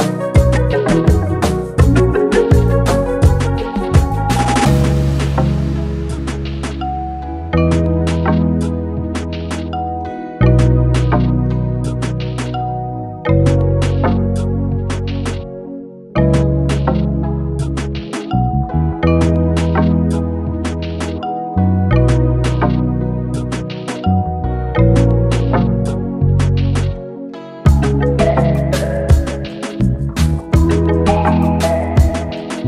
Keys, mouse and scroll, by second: 3.7-12.2 drag, 15.7 ctrl+space, 15.9 ctrl+click, 16.2 ctrl+space, 16.7 click, 17.0 space, 17.5 ctrl+space, 17.7 ctrl+click, 18.0 ctrl+space, 18.4-22.5 drag, 25.7-26.9 drag, 26.9 ctrl+d, 27.3 space, 27.5 click, 27.7 space, 29.0-32.6 drag.